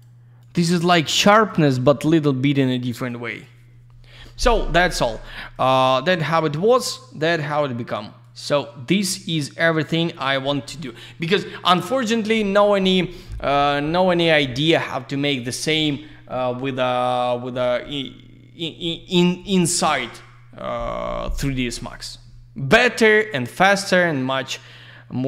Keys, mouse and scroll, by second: 0.0 double click, 0.4 click, 0.5 click, 0.8 click, 0.9 double click, 1.3 click, 1.4 click, 1.7 click, 1.8 double click, 3.0 click, 3.0 click, 3.3 click, 3.4 double click, 5.5 click, 6.7 click, 8.2 click, 9.3 click, 23.7 click, 23.9 click.